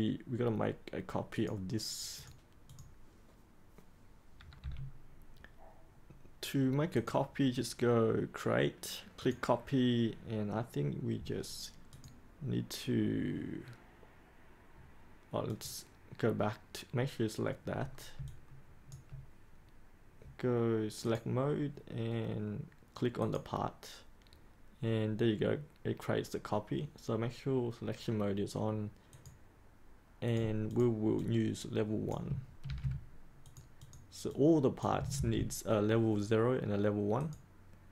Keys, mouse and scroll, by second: 4.5 3, 6.9 click, 18.2 alt+click, 21.0-32.2 drag, 32.6 ctrl+c, 33.4 click, 35.1 ctrl+v, 37.1 click.